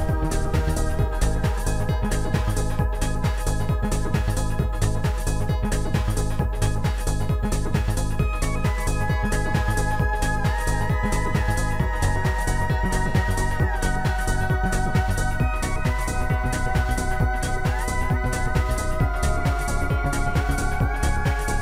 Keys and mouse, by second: 0.1 right click, 0.8 right click, 2.1 right click, 3.6 click, 6.6 click, 6.6 right click, 8.0 click, 10.1 click, 10.9 shift+click, 11.9 shift+click, 14.3 shift+click, 20.0 click.